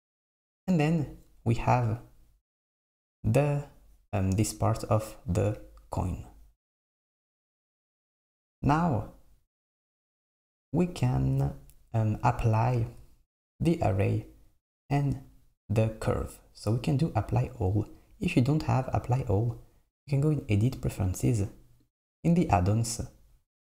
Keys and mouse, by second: 7.3 s, 10.1 click, 14.0-17.9 drag, 18.9-22.0 drag.